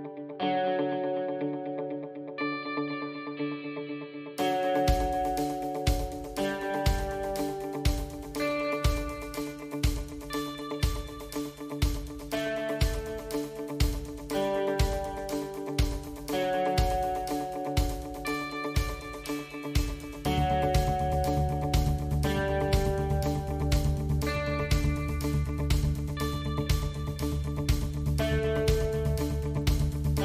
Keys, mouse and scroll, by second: 2.8-8.9 drag, 8.9 KP_Decimal, 13.4-14.6 middle drag, 15.8 Tab, 16.8 3, 17.5 click, 19.1 KP_3, 20.3 shift+click, 21.3 KP_1, 22.3 shift+z, 24.7 KP_1, 25.4 KP_3, 26.4 KP_Decimal, 29.0 i.